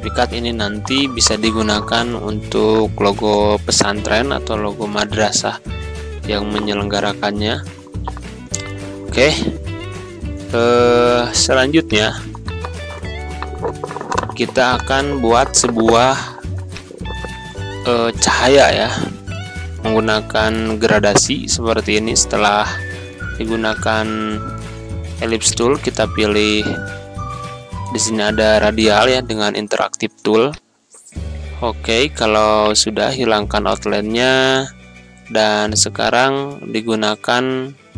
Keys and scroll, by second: 2.9 1, 3.2 Return, 6.2 Right, 7.3 Down.